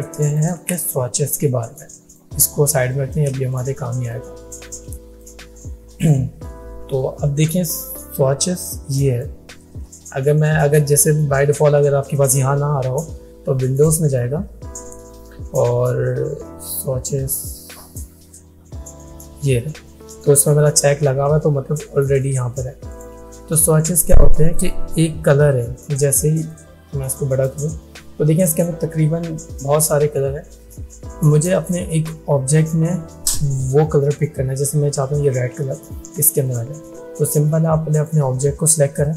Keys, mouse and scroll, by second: 2.8 space, 3.0 click, 5.1 space, 5.3-6.2 click, 5.6 space, 8.6-9.6 drag, 13.8 click, 22.9 click, 26.5-27.8 drag, 31.7-32.4 drag, 36.5 click.